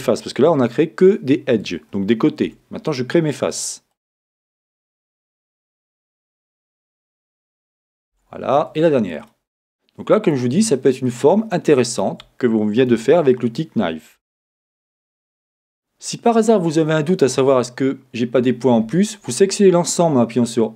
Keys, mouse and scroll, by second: 3.9 click, 5.2 shift+click, 6.1 shift+click, 7.2 shift+click, 9.3 click, 11.1 shift+click, 14.2 Tab, 18.4 a.